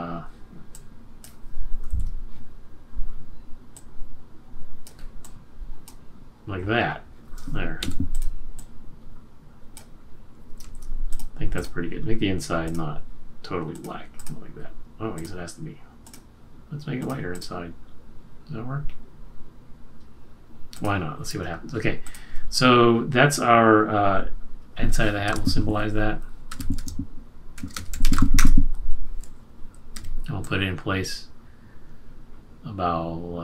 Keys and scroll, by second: 1.8 super+z, 7.8 v, 10.6 super+z, 25.2 F8, 26.4-28.8 typing, 29.9 q.